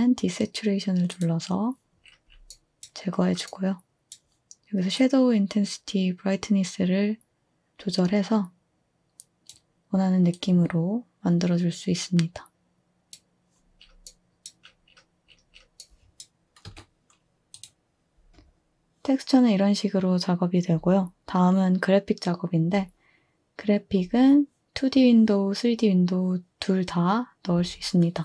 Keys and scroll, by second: 16.7 typing.